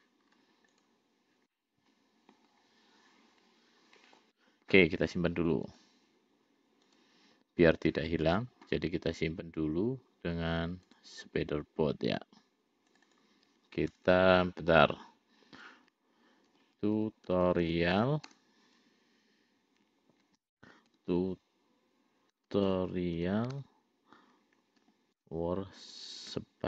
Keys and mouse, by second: 1.1 click, 1.9-4.6 middle drag, 6.0-7.8 drag.